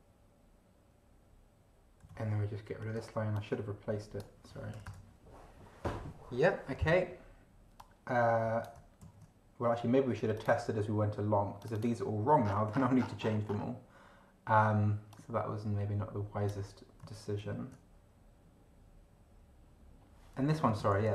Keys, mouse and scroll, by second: 2.0 Down, 3.3-4.4 drag, 4.7 BackSpace, 7.8-8.8 drag, 9.0 ctrl+c, 10.3 click, 11.6 click, 12.5-13.0 scroll down 2, 13.0 scroll down 1, 13.2-13.7 scroll up 2, 15.1-16.7 drag, 17.4 ctrl+v, 20.4 Left.